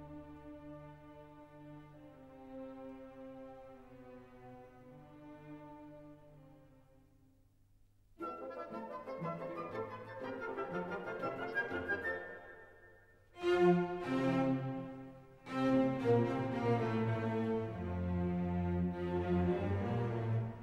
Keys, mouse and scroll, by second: 1.4 click, 2.2 scroll down 1, 2.9 scroll down 1, 3.8 scroll down 1, 4.9 scroll down 1, 5.9 scroll down 1, 10.2 scroll down 1, 10.3-20.6 drag.